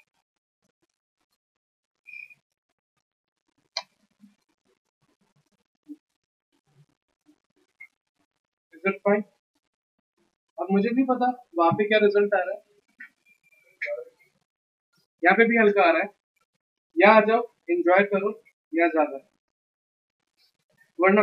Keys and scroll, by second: 8.1 v.